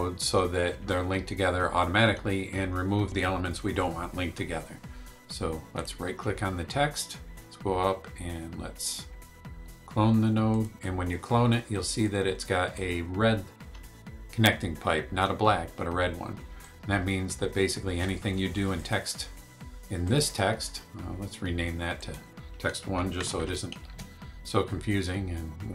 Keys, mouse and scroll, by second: 5.7 right click, 10.5 click, 12.0 click, 16.6-18.2 drag, 18.7 click, 20.0 click, 21.9 click, 23.2 BackSpace, 23.9 Return.